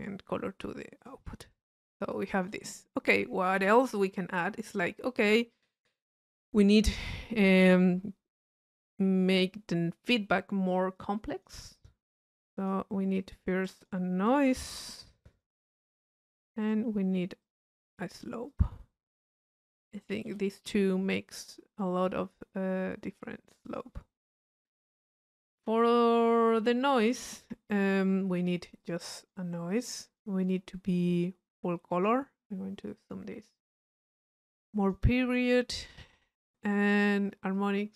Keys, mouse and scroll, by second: 0.0 click, 1.0-2.9 drag, 11.0 click, 12.2 click, 13.2 click, 15.3 click, 16.2 click, 17.4-19.8 drag, 23.7-24.7 drag, 25.1 click, 28.8 click, 29.7 click, 31.1 click, 32.1 middle click, 32.9 click, 34.7 click, 35.5 click, 37.6-37.9 drag.